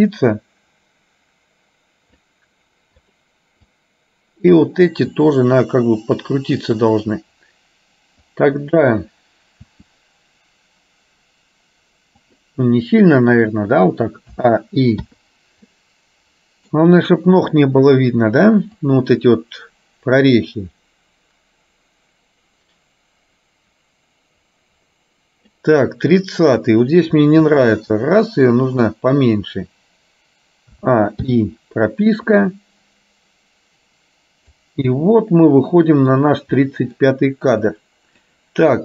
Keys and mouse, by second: 0.4-2.4 drag, 3.1 click, 3.8-4.8 drag, 5.2 r, 8.3 click, 9.8 r, 15.2 i, 15.8-16.8 middle drag, 19.1-25.8 drag, 26.6 click, 27.7 r, 31.4 i, 32.4-34.7 drag, 35.1-36.3 middle drag, 36.7 middle click, 37.8 click.